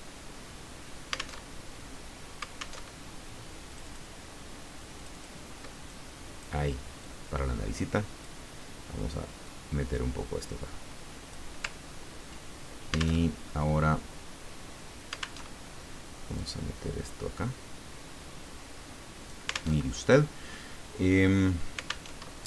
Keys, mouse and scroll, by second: 1.4 alt+Tab, 2.8 alt+Tab, 3.7 click, 5.0 click, 6.0 click, 7.0-8.4 drag, 9.4-11.5 drag, 13.2 alt+Tab, 15.4 alt+Tab, 16.3-19.5 drag, 19.8 alt+Tab, 22.1 alt+Tab.